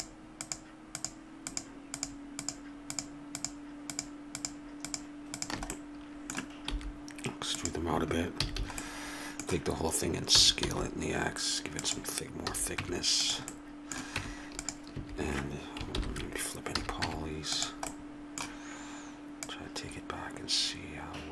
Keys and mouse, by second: 5.8-7.5 middle drag, 6.7 e, 8.4 a, 8.6 a, 10.3 s, 12.5 a, 12.8 Tab, 14.2 Tab, 14.9 a, 16.7 ctrl+n, 16.7 a, 17.0 Tab.